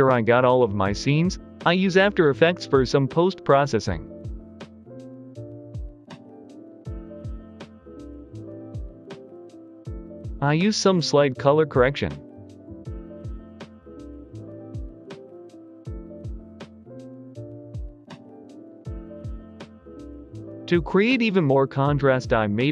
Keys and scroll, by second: 8.9-10.7 typing, 14.2 1, 14.3 Return, 16.3 Return.